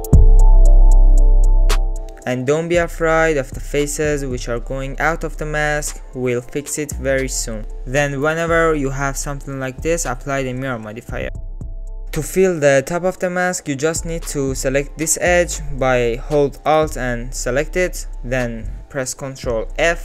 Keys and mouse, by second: 0.0 ctrl+shift+z, 0.1 click, 0.8 click, 1.3 alt+z, 1.4 middle click, 1.6 alt+z, 2.1 middle click, 2.7 middle click, 3.2 middle click, 3.8 middle click, 5.9 middle click, 8.4 middle click, 9.4 Tab, 9.6-10.5 middle drag, 11.2 click, 11.5 click, 11.9 middle click, 12.1 Tab, 12.6 alt+z, 13.3 alt+click, 14.2 click, 15.3 shift+click, 16.5 alt+z, 19.5 ctrl+f.